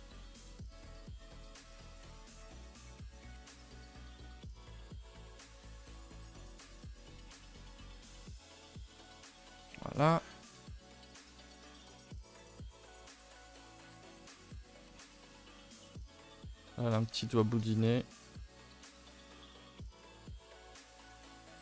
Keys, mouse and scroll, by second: 0.1 Tab, 0.6 Tab, 1.0 r, 2.5 g, 3.5 2, 3.7 alt+click, 4.1 g, 5.4 Tab, 5.7 scroll down 1, 6.2 shift+middle click, 6.7 Tab, 6.9-7.6 scroll up 2, 7.6 s, 8.3 g, 9.1 Tab, 9.4 scroll down 2, 9.7 shift+middle click, 10.0-11.1 scroll up 2, 11.1 click, 11.4 shift+middle click, 11.7 scroll down 2, 12.0 Tab, 12.2 middle click, 12.5 a, 12.6 a, 12.8 shift+middle click, 13.4 click, 13.6 scroll down 2, 13.8 shift+middle click, 14.2 3, 14.4 click, 14.7 shift+middle click, 14.9 scroll up 1, 15.1 middle click, 15.6 scroll up 2, 15.8-16.5 scroll down 1, 17.1 e, 19.0 g, 19.8 r, 21.4 s.